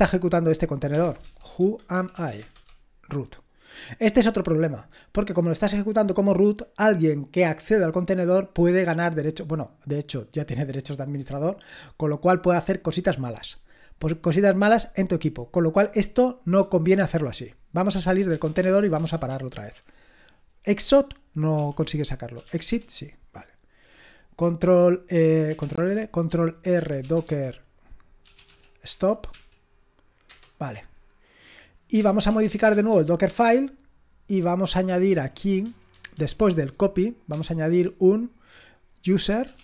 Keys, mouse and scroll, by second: 0.7-2.6 typing, 17.8-19.0 typing, 21.3-22.9 typing, 25.6 ctrl+l, 26.7-29.3 typing, 30.3 Return, 31.7-33.2 typing, 33.3 Return, 35.0-37.8 typing, 38.8-39.6 typing.